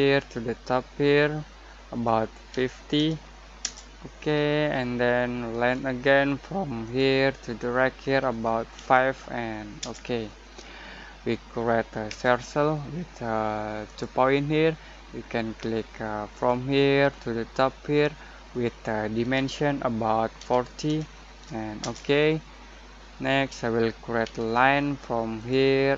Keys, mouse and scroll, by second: 2.5-2.9 typing, 3.7 Return, 5.5 l, 6.8 click, 8.7 5, 9.8 Return, 12.0 c, 13.8 click, 16.3 click, 16.6 click, 20.8 typing, 21.8 Return, 24.2 l, 25.4 click.